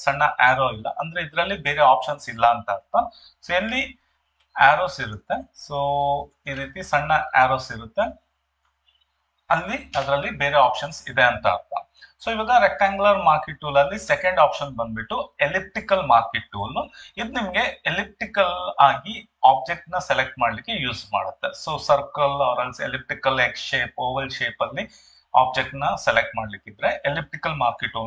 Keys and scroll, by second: 4.3 ctrl+2, 10.0 Escape.